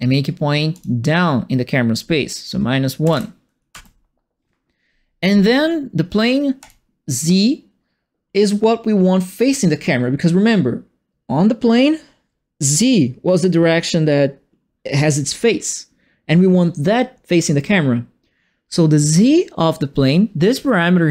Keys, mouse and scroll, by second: 0.7 click, 3.0 KP_Subtract, 3.7 KP_Add, 6.6 click, 20.8-21.1 drag.